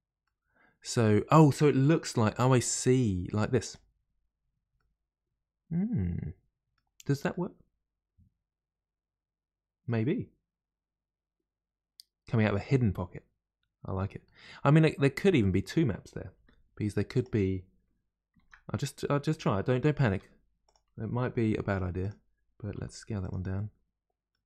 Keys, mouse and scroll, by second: 0.2-2.4 middle drag, 2.4 r, 2.4 r, 4.8-11.8 middle drag, 14.2-16.3 middle drag, 16.3 g, 18.4 shift+d, 20.0 r, 23.5-24.4 middle drag.